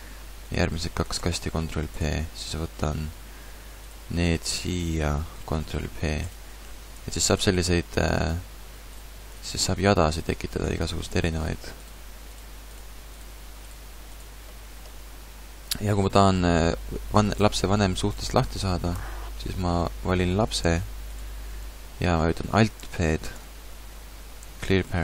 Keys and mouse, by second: 1.2 ctrl+p, 5.5 ctrl+p, 7.1 a, 8.2 g, 9.5 g, 11.9 g, 12.8 g, 13.7 g, 14.9 a, 21.1-22.9 drag, 23.3 alt+p.